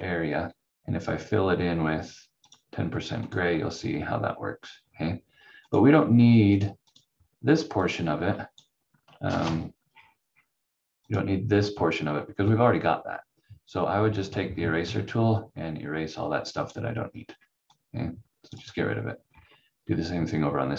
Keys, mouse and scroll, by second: 2.4 click, 3.6 scroll down 1, 4.7 scroll up 1, 5.6 click, 9.2 ctrl+z, 9.8 scroll up 1, 11.0 click, 11.9-12.3 scroll down 1, 14.2 click, 14.5 scroll down 1, 15.4 click, 17.1 scroll down 1, 17.8 click, 19.2 scroll down 1.